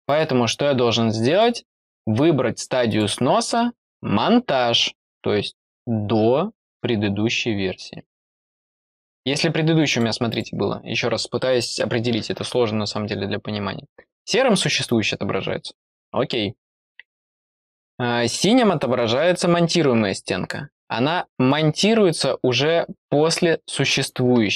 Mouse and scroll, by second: 0.0 click, 1.2 click, 2.8 click, 3.7 click, 6.6 click, 9.0 click, 9.8 click, 10.2 click.